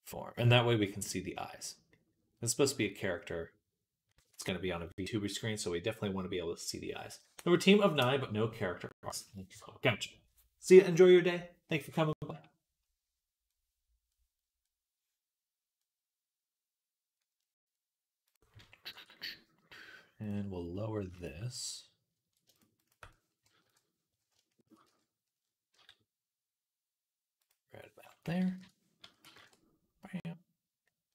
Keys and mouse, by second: 2.1-20.9 right drag, 18.8 Tab, 21.0 ctrl+click, 22.7 shift+click, 23.5 KP_3, 25.6-31.1 drag, 25.6 g, 28.9 s.